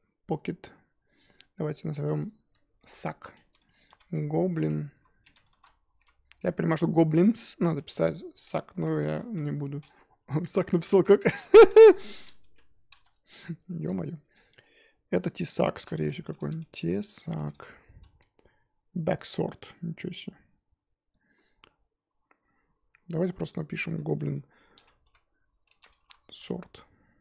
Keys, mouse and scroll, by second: 2.2-12.4 drag, 12.4 BackSpace, 13.1 click, 13.4-14.6 shift+middle drag, 14.6 click, 23.5-27.2 drag.